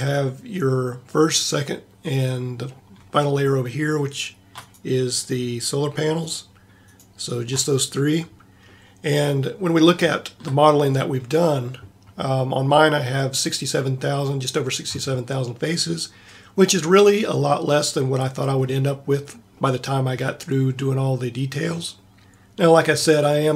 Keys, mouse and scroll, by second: 8.7-12.5 middle drag, 19.8-20.8 middle drag.